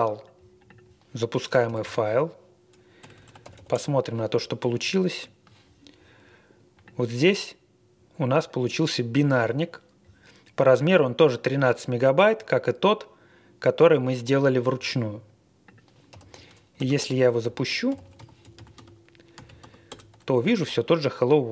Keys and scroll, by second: 1.6 typing, 3.0-3.9 typing, 16.1 typing, 16.7 ctrl+BackSpace, 16.9 ctrl+BackSpace, 17.1 ctrl+BackSpace, 17.4 ctrl+l, 17.6-19.9 typing.